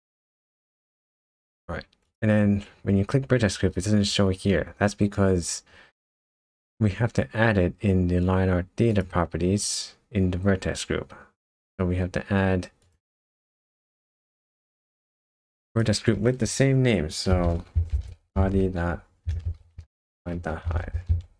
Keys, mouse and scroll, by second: 2.1 click, 8.9 click, 15.1 click, 15.5 click, 15.7 click.